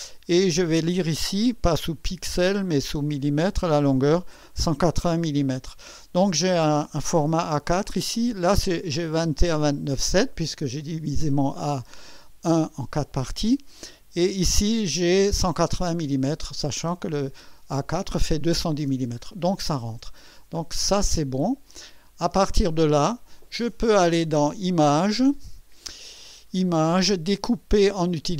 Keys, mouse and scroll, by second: 2.0 click, 3.1 click, 19.3-19.9 scroll down 2, 20.4 scroll up 3, 20.9-21.7 ctrl+scroll down 2, 22.0 ctrl+scroll up 2, 25.1 click.